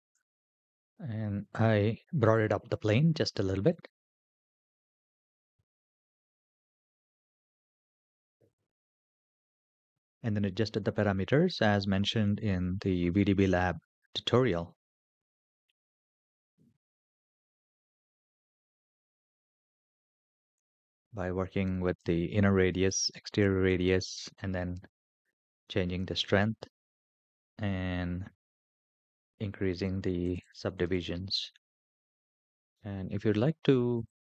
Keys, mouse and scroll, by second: 1.5-2.5 middle drag, 3.6-4.3 middle drag, 8.7-9.1 middle drag, 9.4 scroll up 1, 9.6-10.1 scroll down 4, 11.0-11.8 scroll down 2, 15.8-16.8 middle drag, 17.3-18.3 scroll up 3, 18.5-18.9 shift+middle drag, 20.3-22.0 drag, 22.7-24.2 drag, 24.2-24.9 scroll down 1, 24.9 click, 24.9 scroll down 1, 26.3 scroll down 2, 30.0 click, 30.4 click, 31.9 scroll down 3.